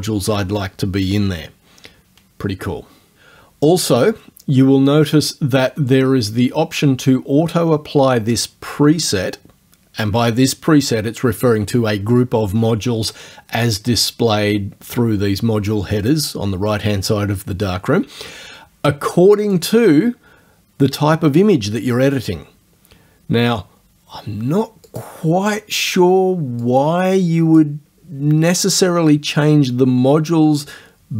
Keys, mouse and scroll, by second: 19.4 click, 24.9 click, 26.7-27.8 drag.